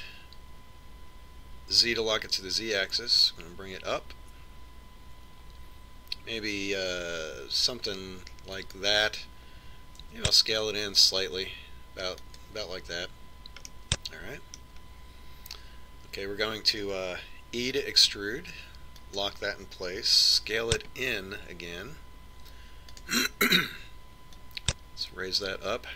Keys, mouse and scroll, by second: 0.9 e, 11.7 s, 15.3-17.2 middle drag, 19.3 e, 22.0 s.